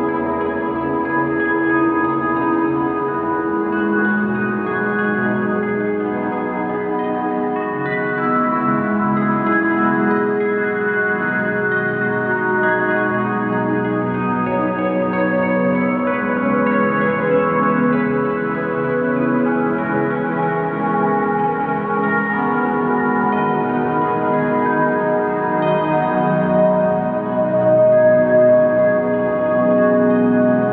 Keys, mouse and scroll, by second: 21.8 click, 24.6 `, 24.9 shift+click, 27.2 KP_7, 28.1 shift+click, 30.0 click, 30.4 KP_7.